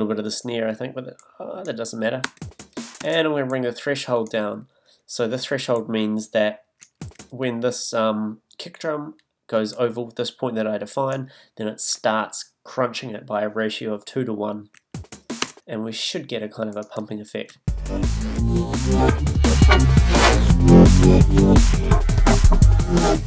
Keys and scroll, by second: 2.2 space, 6.8 space, 14.7 space, 17.5 space.